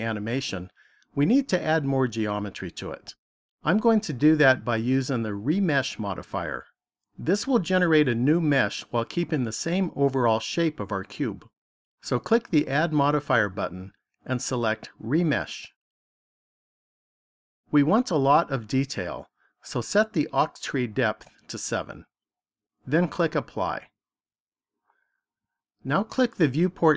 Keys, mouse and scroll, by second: 12.6 click, 19.7 click, 24.2 click.